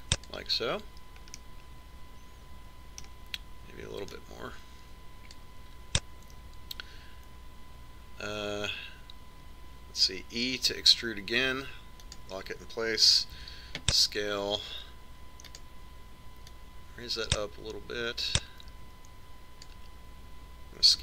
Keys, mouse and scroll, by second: 0.0 click, 3.1-4.8 middle drag, 5.9 click, 12.4 e, 15.2 s, 18.3-20.0 drag.